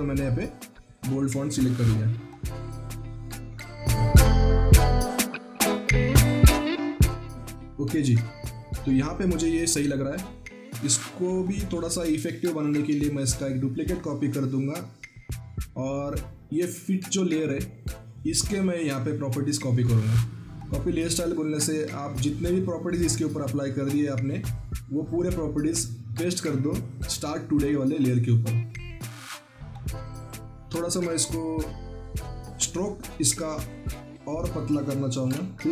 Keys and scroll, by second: 1.7 ctrl+t.